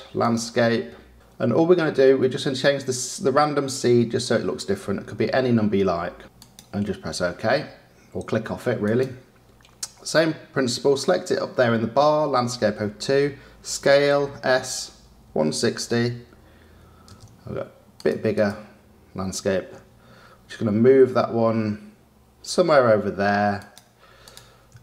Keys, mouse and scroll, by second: 3.7-6.2 drag, 6.3 click, 8.8 click, 13.8 s, 17.9 click, 18.3 click, 19.7 g, 24.2 click.